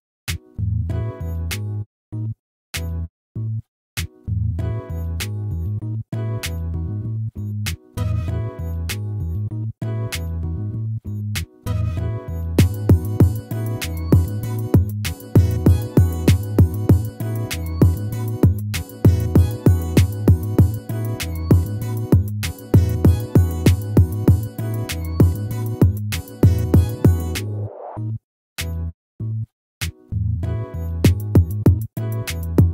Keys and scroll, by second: 15.0 ctrl++, 31.4 ctrl+z.